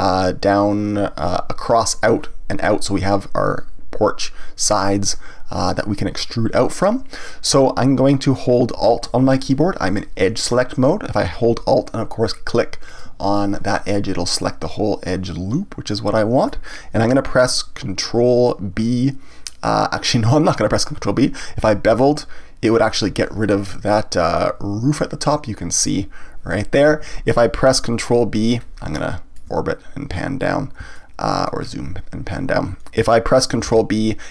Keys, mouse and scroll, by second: 12.9 alt+click, 13.9-16.9 middle drag, 21.9 ctrl+b, 25.8 click, 26.9 ctrl+z, 28.6-29.0 scroll down 2, 29.0-30.0 shift+middle drag, 30.0 scroll up 1, 30.2-30.9 scroll down 2, 30.9 shift+middle click, 31.6-33.7 scroll up 2, 33.7 ctrl+b.